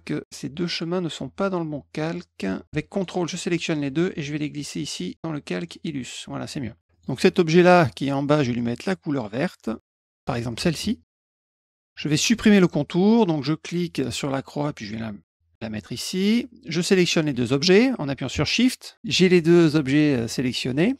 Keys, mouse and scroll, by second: 0.2 click, 0.7 click, 2.9 ctrl+click, 3.9-5.6 drag, 6.9 click, 9.9 click, 10.5 click, 11.4 click, 11.5 middle click, 14.2-15.8 drag, 18.4 shift+click.